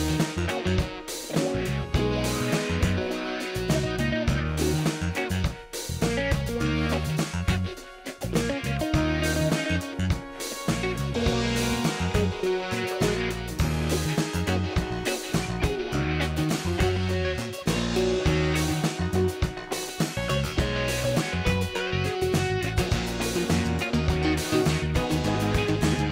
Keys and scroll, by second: 11.8 space, 12.4 space.